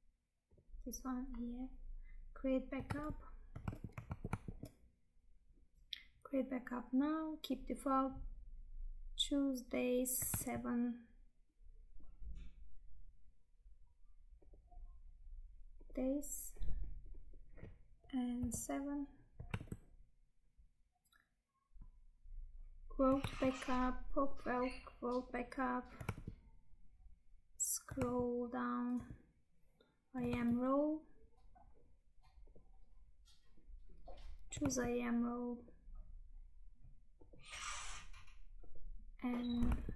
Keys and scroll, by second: 3.0 Tab, 4.2 alt+Tab, 10.5 Tab, 19.6 Tab, 23.4 Tab, 26.3 Tab, 28.2 Tab, 30.4 Tab, 34.8 Tab, 39.8 Tab.